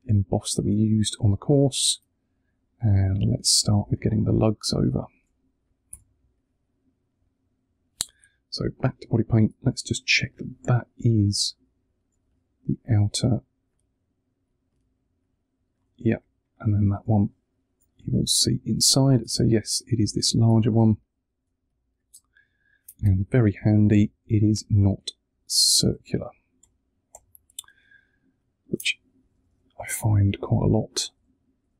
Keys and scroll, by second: 5.8 v, 8.1 super+Tab, 11.2 3, 16.9 3, 17.8 1, 19.1 super+Tab, 20.7 space, 22.9 v, 29.1 Up.